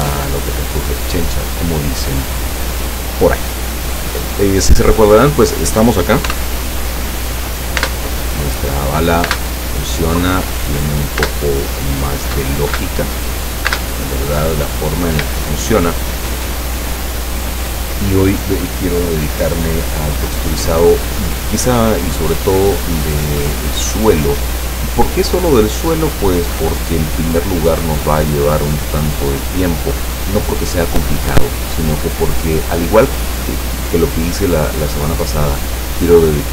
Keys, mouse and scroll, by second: 1.9-3.4 drag, 3.6 scroll down 2, 4.0 click, 5.0-5.4 scroll up 2, 5.4 scroll down 2, 6.4 p, 7.9 space, 9.4 space, 11.4 space, 12.8 space, 13.8 space, 15.2 Escape, 23.0 right click.